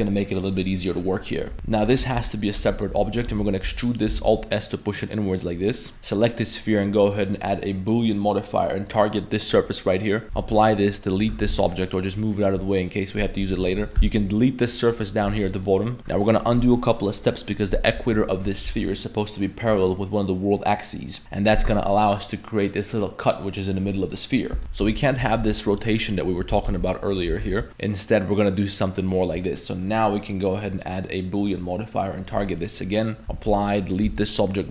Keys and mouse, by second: 1.5 middle drag, 1.5 Tab, 2.0 a, 2.0 l, 2.2 p, 2.6 Tab, 2.7 right click, 2.9 Tab, 3.1 middle drag, 3.3 a, 3.6 e, 4.2 alt+s, 5.7 middle click, 6.6-8.1 drag, 10.4 ctrl+a, 10.7 right click, 11.1 right drag, 11.3 g, 12.7 middle drag, 13.5 Tab, 14.0 x, 15.0 middle drag, 15.3 Tab, 15.5 middle click, 16.0 middle click, 17.9 2, 18.2 alt+right click, 18.6 Tab, 18.8 middle click, 19.4 middle click, 21.9 middle click, 24.5 middle click, 24.6 ctrl+z, 24.8 Tab, 24.8 a, 25.2 r, 29.3-31.5 drag, 32.2 click, 33.3 ctrl+a, 33.8 right click, 34.0 x, 34.3 middle drag.